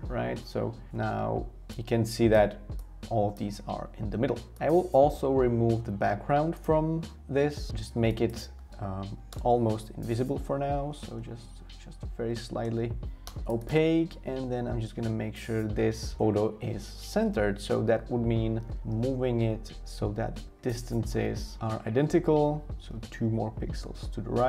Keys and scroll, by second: 4.0 super+z, 9.1 0, 9.3 Return, 10.2 shift+Down, 10.3 typing, 17.9 shift+Return, 23.8 shift+Return.